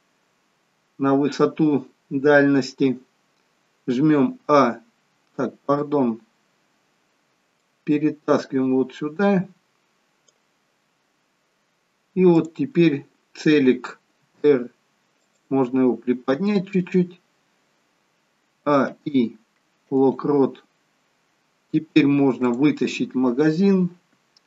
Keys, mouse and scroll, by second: 7.7 click, 12.5 click, 14.4 r, 18.7 a, 18.9 i, 20.8 scroll down 2, 21.8 scroll down 1, 22.6 click.